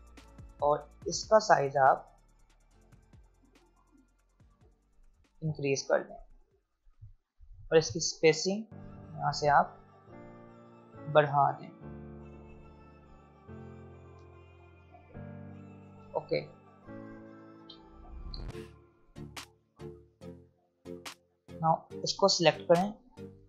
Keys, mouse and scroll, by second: 5.2 click, 7.5 click, 15.6 click, 18.3 click, 18.5-19.6 alt+scroll up 2, 19.6 click, 20.1-20.9 scroll down 2, 20.9-21.9 scroll down 1, 21.9-23.4 drag.